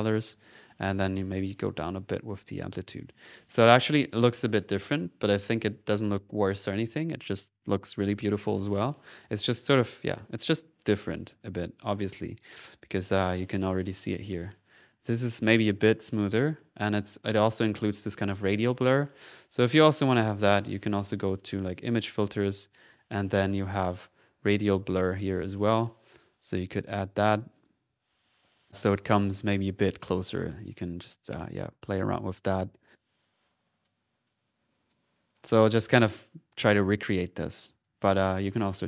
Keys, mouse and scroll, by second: 1.1-2.9 drag, 3.2 click, 3.7 click, 3.8 middle click, 4.5 click, 7.2 middle click, 8.2 click, 9.3 click, 9.9 click, 10.4 click, 10.7 middle click, 10.9 click, 11.5 middle click, 12.2 click, 12.8 click, 13.3 middle click, 15.0 click, 15.9 click, 17.2 ctrl+middle click, 17.9 ctrl+z, 18.6 ctrl+click, 18.8 ctrl+click, 20.1 click, 20.6 middle click, 21.1 middle click, 21.7 click, 22.7 middle click, 23.4 middle click, 24.8 click, 26.3 click, 26.6 click, 27.3 click, 28.5 click, 29.0 click, 29.2 click, 30.3-32.2 drag, 32.4 click, 35.3 middle click, 35.8 click, 36.1 middle click, 36.5 middle click, 36.7 click, 37.3 middle click, 37.6-38.8 drag, 38.4 middle click.